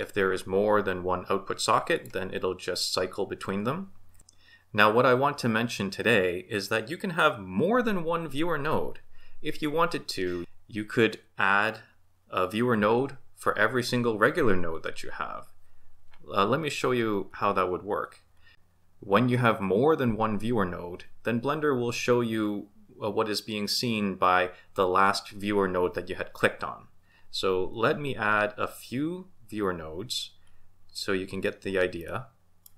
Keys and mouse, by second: 1.9 ctrl+shift+click, 32.0 middle click.